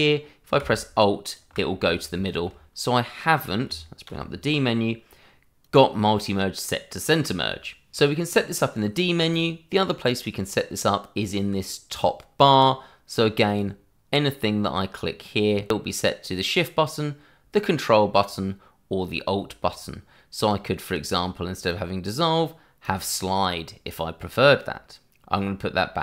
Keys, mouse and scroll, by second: 0.7 alt+click, 2.1 ctrl+z, 4.0 d, 5.6 click, 13.4 click, 22.8 click.